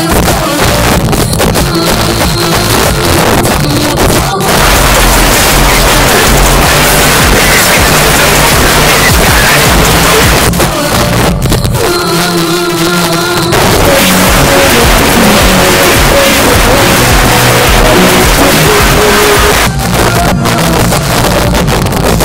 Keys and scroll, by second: 10.3 Page_Down, 19.5 Page_Down.